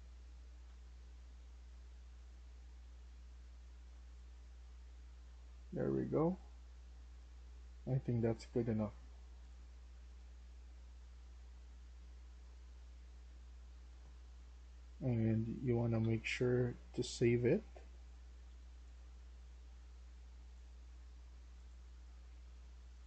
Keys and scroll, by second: 12.8-18.6 typing.